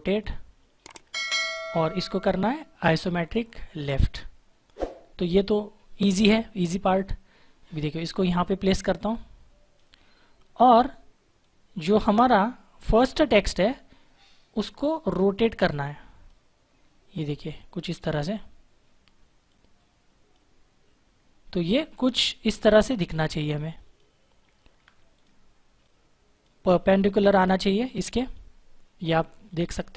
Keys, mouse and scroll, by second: 3.6 click, 6.1-9.7 drag, 15.1 click, 23.0 click, 24.4 Up, 25.1 click.